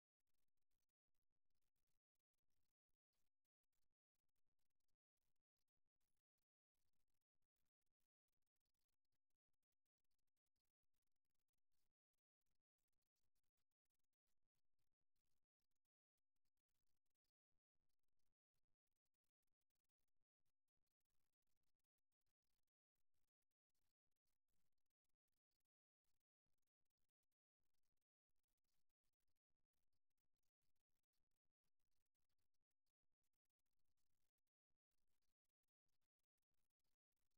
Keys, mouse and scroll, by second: 3.7 e, 7.8 r, 10.6 g, 17.5 e, 21.2 r, 23.4 g, 28.4 e, 31.4 r, 34.5 e.